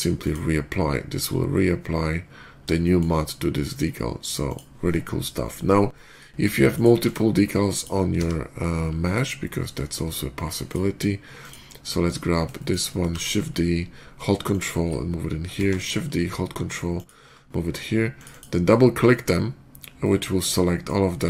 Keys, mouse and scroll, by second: 0.1 click, 2.0 middle click, 2.7 shift+middle drag, 4.3 shift+click, 5.8 middle drag, 6.6 click, 6.8 x, 6.9 click, 7.6 click, 8.0 d, 10.5 click, 11.2 click, 11.9 middle click, 12.4 shift+middle click, 12.9 shift+d, 14.3 ctrl+shift+d, 14.3 click, 15.4 shift+d, 16.4 ctrl+shift+d, 16.8 click, 18.0 ctrl+click, 18.1 ctrl+click, 19.9-20.7 middle drag.